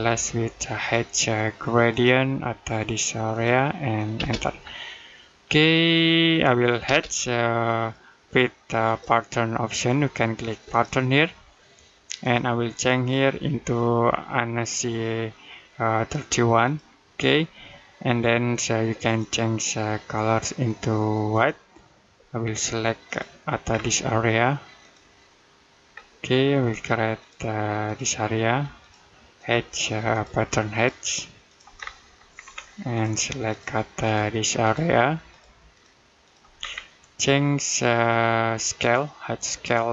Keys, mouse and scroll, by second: 0.6 click, 4.0 space, 4.4-4.8 scroll down 1, 4.8 middle click, 6.7 space, 8.7 click, 16.5 click, 23.6-24.6 scroll up 1, 24.6 click, 25.7-26.4 scroll down 1, 27.0 click, 31.6 scroll down 1, 31.9 middle click, 32.1-32.8 scroll up 1, 32.8 click, 36.4-36.8 scroll down 1, 36.8 scroll up 1.